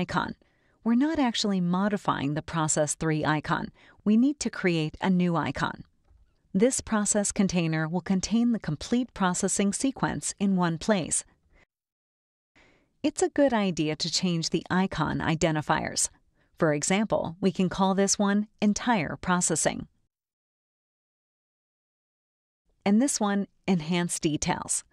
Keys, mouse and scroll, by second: 6.2-9.1 drag, 12.2 click, 15.5-17.0 drag, 17.8 click, 17.8 right click, 18.9 click, 19.1-21.5 typing, 21.8 Return, 23.8 click.